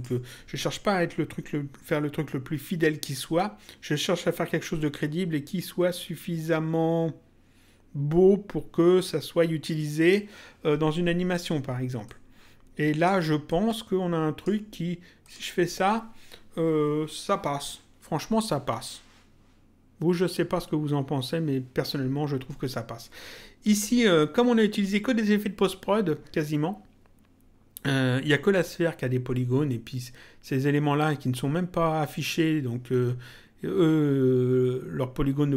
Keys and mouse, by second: 12.0 click, 13.4 click, 15.2 click, 23.6 click.